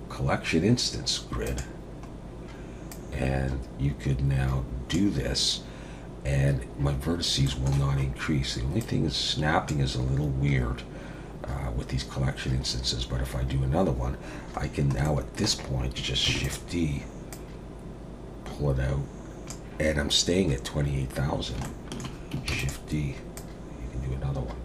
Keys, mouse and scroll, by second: 2.1-2.9 scroll down 2, 2.9 click, 7.1-7.4 scroll up 2, 7.4 shift+middle click, 7.9-8.8 scroll up 2, 8.8 click, 11.4-11.9 scroll down 2, 14.6-15.0 scroll down 1, 15.0 shift+middle click, 16.3 shift+d, 17.3 click, 21.3 scroll down 1, 21.6 shift+middle click, 22.5 shift+d, 23.4 click.